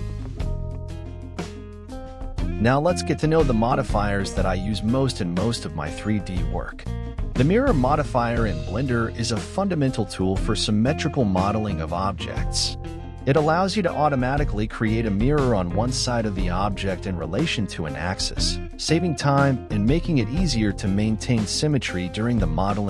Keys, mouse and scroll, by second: 4.7 Tab, 5.7 x, 7.2 right click, 7.7 KP_1, 9.0 shift+middle click, 9.7-10.1 scroll up 6, 11.1 Tab, 11.4-12.5 scroll down 4, 12.5 click, 15.7 shift+click, 17.9-19.2 scroll up 7, 19.2-19.7 scroll up 1, 19.7-21.0 scroll down 3, 21.0 click, 21.6-22.2 scroll down 1, 22.2 shift+click.